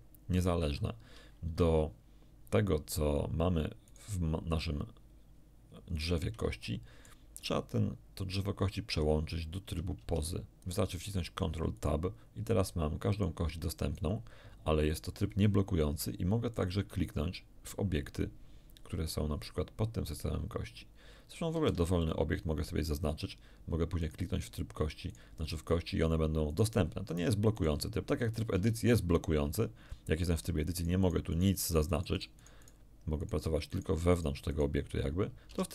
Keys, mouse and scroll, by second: 0.6 g, 1.4 Escape, 3.8 right click, 5.8 scroll up 1, 6.6 shift+middle click, 9.9 ctrl+Tab, 11.7 right click, 12.5 right click, 13.1 right click, 13.7 right click, 16.5 right click, 21.5 shift+d, 21.9 shift+click, 23.9 right click, 25.1 right click, 26.5 right click, 27.0 right click, 27.5 right click, 28.5 Tab, 30.7-32.8 right drag, 33.1 right click, 33.7 right click, 34.1 right click, 35.5 Tab.